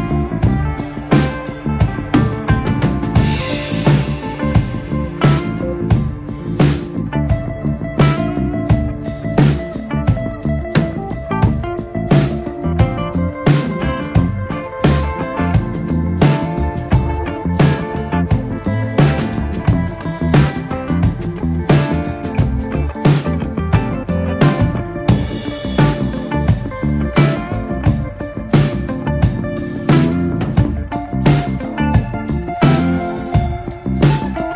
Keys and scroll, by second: 2.0 ctrl+space, 3.7-5.1 typing, 10.0 x, 10.5 Escape, 11.5 ctrl+space, 12.1 x, 12.5 x, 14.1-17.6 typing, 16.2 Escape, 19.0 space, 20.0 Escape, 20.1 space, 21.4 r, 23.0 space, 23.2 r, 23.6 space, 25.1 b, 25.6 x, 28.9 space, 32.5 ctrl+space, 32.9 Escape, 33.1 space, 33.7 r, 34.0 b.